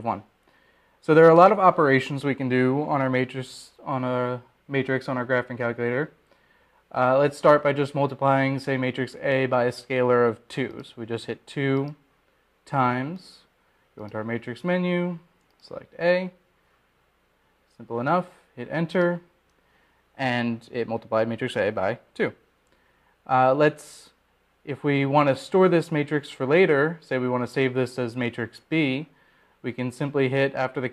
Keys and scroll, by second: 13.4 2, 18.4 Return, 21.6 Return.